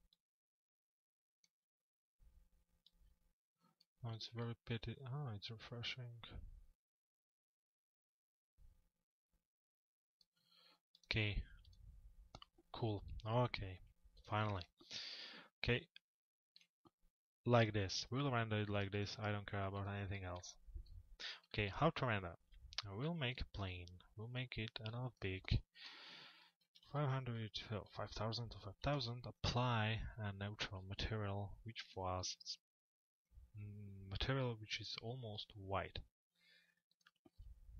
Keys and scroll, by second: 35.2 m.